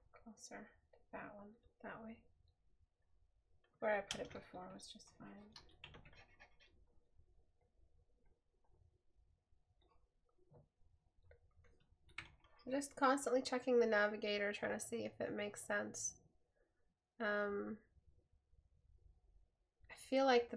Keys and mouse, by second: 10.8 right click.